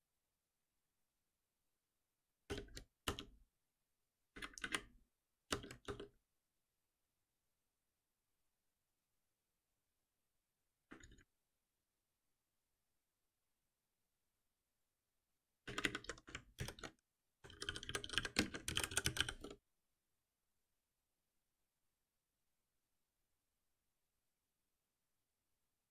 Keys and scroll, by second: 2.5 alt+Return, 13.9 ctrl+shift+Right, 16.5 ctrl+shift+Right.